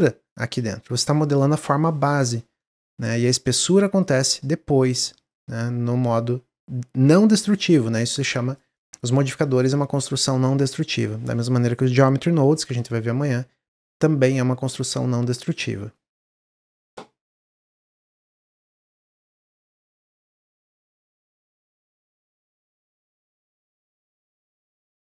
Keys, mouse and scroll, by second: 2.6 Tab, 3.0 middle click, 3.9 click, 4.3-5.3 middle drag, 5.3 click, 6.0 click.